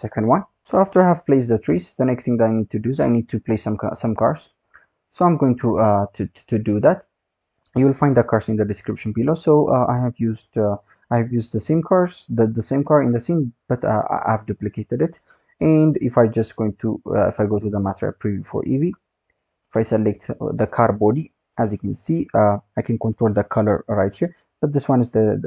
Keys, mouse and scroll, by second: 8.0 ctrl+v, 9.2 drag, 10.0 middle click, 12.7-13.2 scroll down 2, 13.2-16.2 scroll up 1, 16.6 click, 18.2-18.6 scroll up 2, 18.6-19.0 scroll down 2, 19.1-19.6 scroll up 1, 19.6 click, 25.2 click.